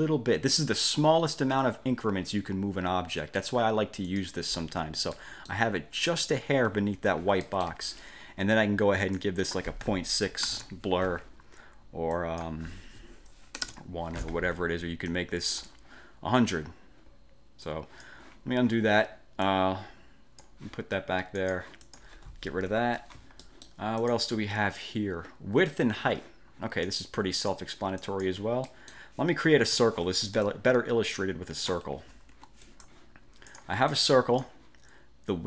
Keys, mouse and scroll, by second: 3.6 click, 4.2 click, 5.3 middle click, 6.6 ctrl+scroll up 2, 7.3 scroll up 2, 7.6 click, 7.8 1, 9.3 click, 10.4 ., 10.7 Return, 10.7 6, 12.3 click, 13.7 1, 15.2-15.9 drag, 17.8 click, 19.6 click, 21.5 click, 22.0 click, 22.8 Delete, 23.5 middle click, 24.1 click, 27.0-27.8 drag, 28.1 click, 28.8 middle click, 29.8 F5, 30.6-31.9 ctrl+shift+drag, 32.4 F1, 32.8 click, 33.6 click.